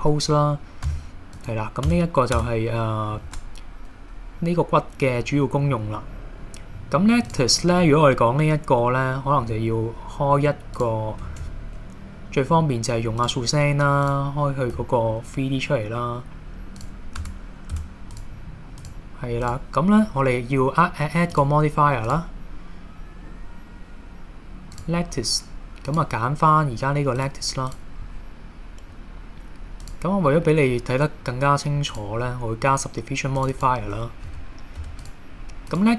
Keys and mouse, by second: 0.9 x, 1.9 Tab, 2.4 Tab, 3.2 shift+a, 9.4 s, 10.8 click, 11.3 shift+a, 14.7 s, 16.8 click, 17.2 Tab, 17.8 Tab, 18.1 click, 19.4 click, 22.2-24.9 drag, 25.9 click, 29.9-32.1 drag, 33.5 click, 33.6 click, 34.3 Tab, 34.8 Tab.